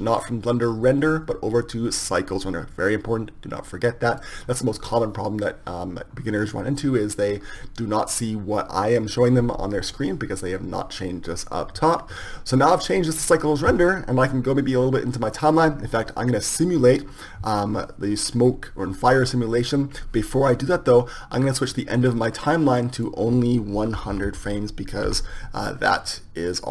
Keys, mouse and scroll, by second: 14.4-16.9 drag, 20.3-26.7 drag, 24.4 KP_0.